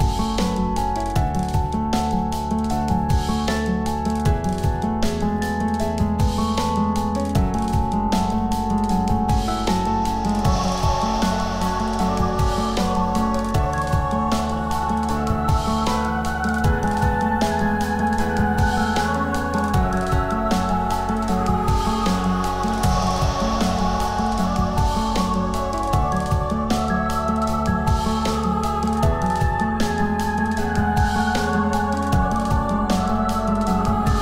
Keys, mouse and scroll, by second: 3.6 m, 16.6 0, 23.6 0, 32.3 7.